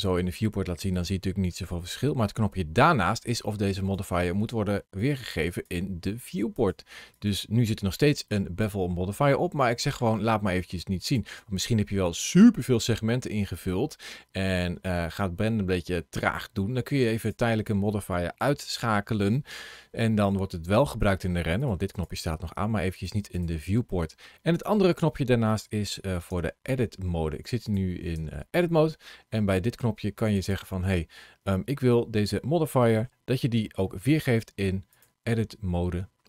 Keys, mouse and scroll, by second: 0.9 shift+middle click, 3.8 click, 4.8 click, 10.9 click, 17.0 click, 21.4 click, 21.8 click, 26.1 Tab, 27.5 click, 28.0 Tab, 28.7 middle click, 30.2 click, 31.9-32.7 scroll up 1, 32.7 shift+middle click, 33.1 middle click, 34.8 click.